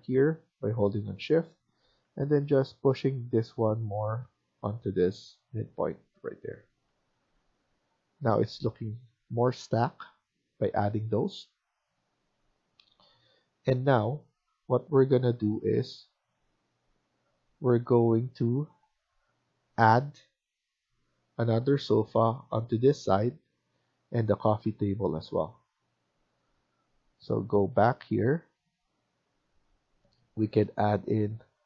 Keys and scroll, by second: 1.9 Right, 3.4 Right, 3.4 Down, 4.8 Right, 4.8 Up, 6.7 Escape, 7.1 Escape, 7.3 Escape, 16.8 Escape, 20.7 Escape.